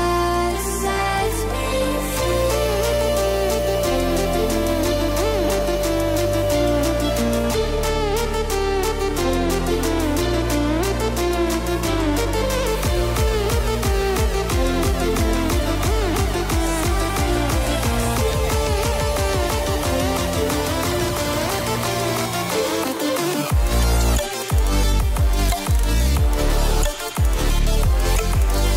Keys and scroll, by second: 3.5 ctrl+z, 26.0 ctrl+alt+t.